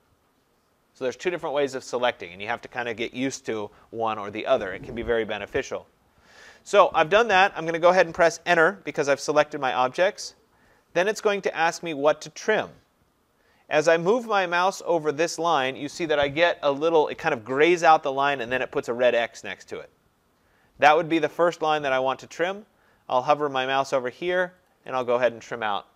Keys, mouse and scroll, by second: 8.9 Return, 21.8 click, 25.1 click.